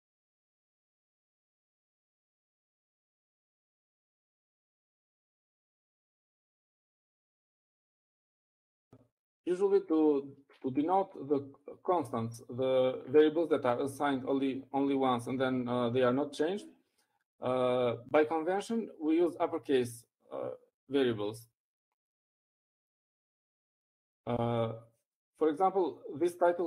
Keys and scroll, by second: 2.6-6.0 typing, 7.6-8.3 typing, 9.5 Up, 9.8 Up, 10.6-11.3 typing.